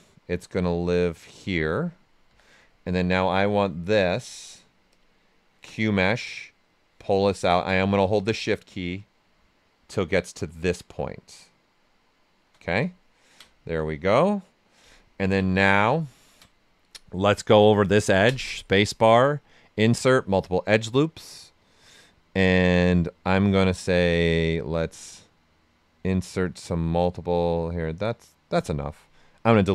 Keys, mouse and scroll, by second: 2.2 q, 4.2 space, 6.6-12.9 drag, 12.9 ctrl+right click, 13.9 right click, 15.5 right click, 18.2 space, 19.2 click, 19.3 space, 20.0 click, 24.7-29.6 drag.